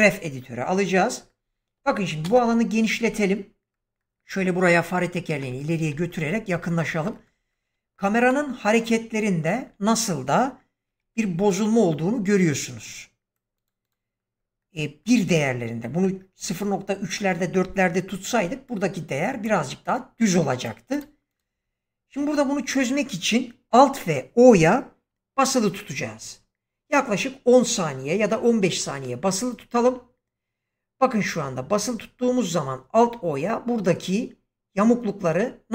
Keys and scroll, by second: 2.1 ctrl+space, 10.8 <, 28.7 alt+o.